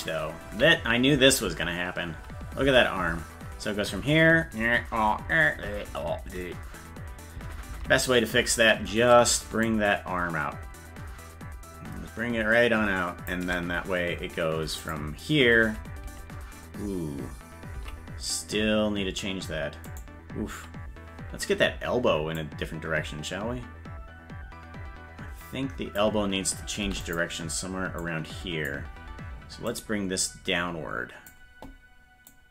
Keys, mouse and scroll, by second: 0.5 Left, 2.2 Right, 2.7 Left, 4.1-7.2 Right, 7.4 Left, 7.7 Left, 9.6-13.3 shift+drag, 14.8 click, 15.6 Right, 17.8 Left, 19.9-21.1 right drag, 22.4-26.0 drag, 26.8 i, 28.0 click, 29.7-31.3 drag, 32.3-32.5 drag.